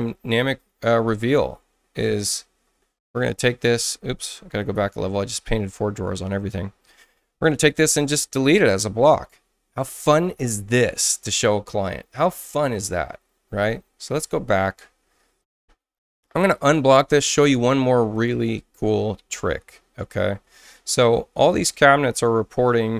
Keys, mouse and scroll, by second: 1.1 space, 2.2 click, 4.7 ctrl+z, 7.7 click, 10.0 click, 14.1 ctrl+z, 16.5 click, 18.1 click.